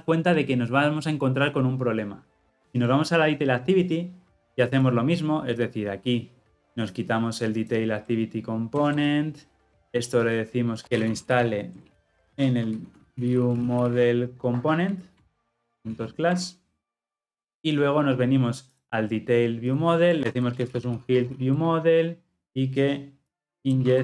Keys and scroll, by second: 12.3 Return, 21.5 Return.